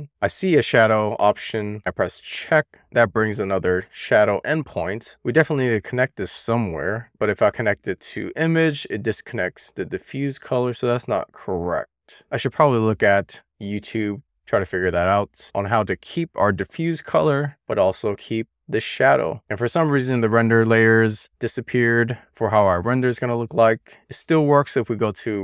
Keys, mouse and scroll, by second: 0.3 click, 1.3 click, 1.9 click, 7.3-8.1 drag, 10.8-11.6 drag, 17.4 click, 18.5 click, 19.2-20.2 drag, 24.3-25.4 drag.